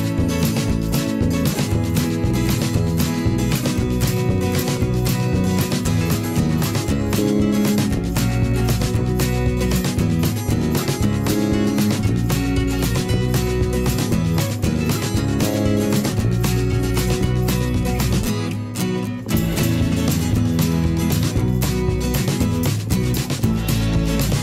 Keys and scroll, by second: 1.4 ctrl+], 1.6 ctrl+[, 3.0 ctrl+[, 9.7 ctrl+[, 13.4 ctrl+[, 14.0 ctrl+shift+[, 14.1 ctrl+], 14.6 ctrl+[, 17.9 ctrl+], 23.2 ctrl+shift+[, 23.3 ctrl+].